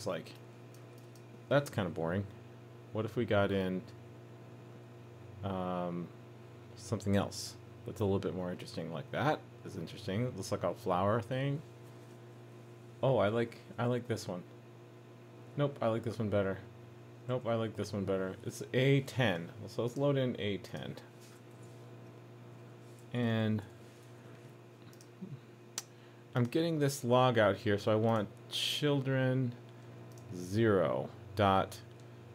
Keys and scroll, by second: 24.0 super+s.